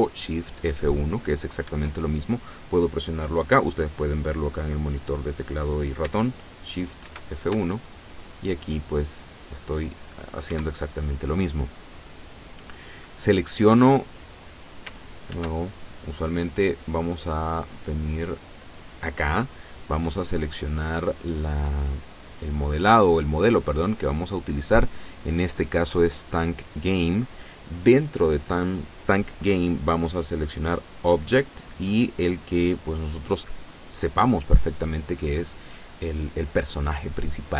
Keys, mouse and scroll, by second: 1.7 Escape, 7.0 shift+F1, 10.5 Escape, 13.2-14.5 middle drag, 15.4 shift+F1, 16.3 click, 18.1 click, 20.3-22.9 drag, 26.8 click, 31.0 click.